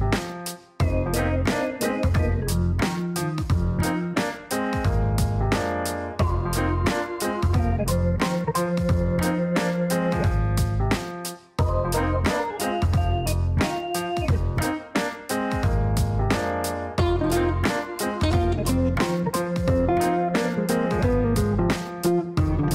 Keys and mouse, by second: 1.7-2.5 typing, 2.6 Down, 2.8 Down, 3.5 Return, 4.3 Return, 6.1 click, 7.4 click, 7.9 click, 9.0 click, 10.0-12.6 typing, 12.6 Down, 15.0-18.1 typing, 18.2 Down, 18.5 Return, 18.9 Return, 20.3 click, 21.7 click.